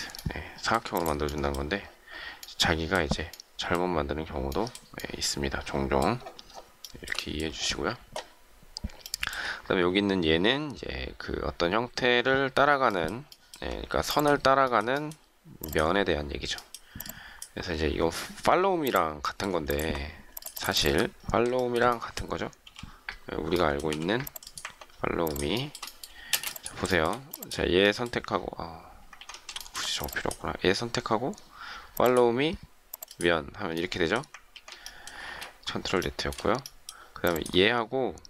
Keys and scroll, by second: 23.9 m, 26.3 shift+space, 29.1 ctrl+z, 34.3 ctrl+z, 35.2 space.